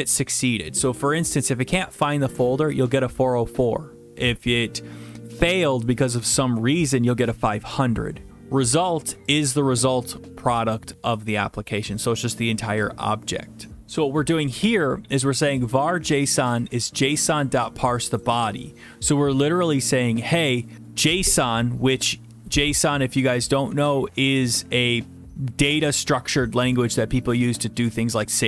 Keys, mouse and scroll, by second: 0.4 click, 0.5 click, 9.4 click, 9.5 click, 15.7 click, 15.8 click, 16.7 click, 16.8 click, 17.4 click, 17.5 click, 18.1 click, 18.2 click.